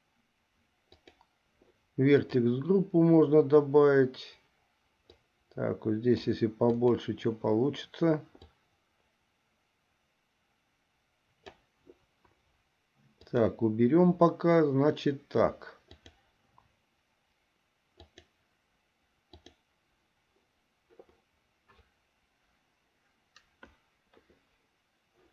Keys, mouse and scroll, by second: 1.1-2.4 drag, 5.3-6.6 drag, 6.9 click, 8.7-11.8 drag, 13.4 click, 16.1 click, 18.1 click, 19.4 click.